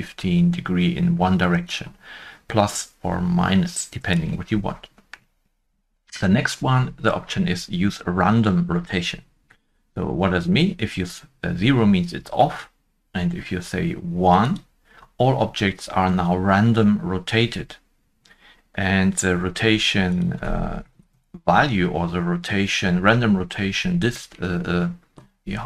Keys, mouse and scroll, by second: 1.5 shift+middle click, 1.5 click, 1.5 1, 1.5 5, 1.5 Return, 1.6 click, 9.7 Return, 9.7 click, 9.7 1, 9.7 5, 9.9-11.3 scroll up 1, 20.8 Return, 20.8 click, 20.8 scroll up 1, 20.8 5, 20.8 3, 23.5 scroll up 1.